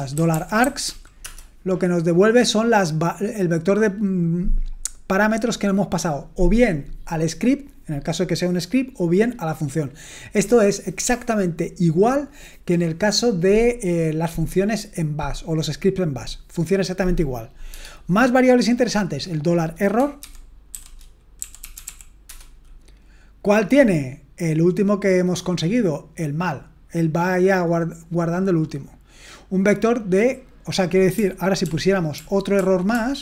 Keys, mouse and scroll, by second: 0.0-1.3 typing, 20.2-22.3 typing, 31.6 ctrl+p, 32.2 ctrl+p, 32.6 ctrl+p, 32.9 ctrl+p.